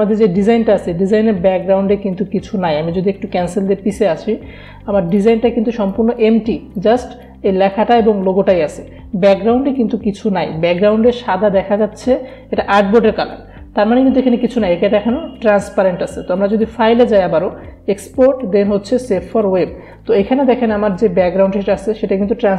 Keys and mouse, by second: 3.4-9.8 drag, 9.8 ctrl+z, 14.5 click.